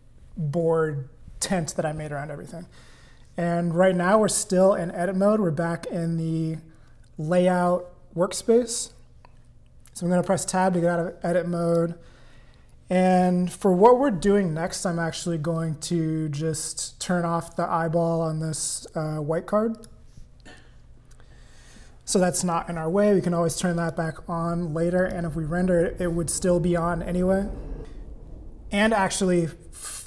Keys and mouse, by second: 10.3 Tab, 11.7 click, 15.1 click, 19.7 click, 23.9 click, 25.0 click.